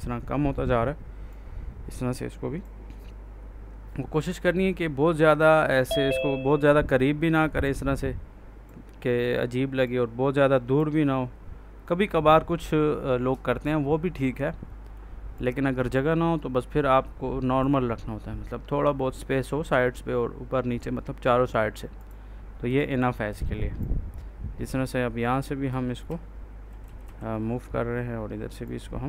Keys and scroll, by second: 26.0 Right.